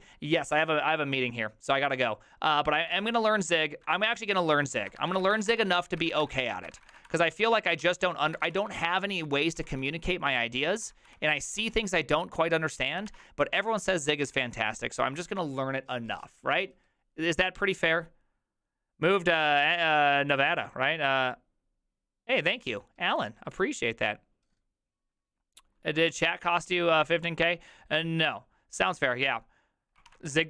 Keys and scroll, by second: 3.0 alt+{, 4.0 ctrl+-, 4.1 ctrl+-, 4.2 ctrl+-, 4.8 ctrl+a, 5.0-11.0 typing, 5.2 ctrl+c, 5.3 ctrl+:, 5.5 Return, 5.8 ctrl+d, 11.1 ctrl+d, 13.1 ctrl+d, 14.3 alt++, 30.1 alt+r.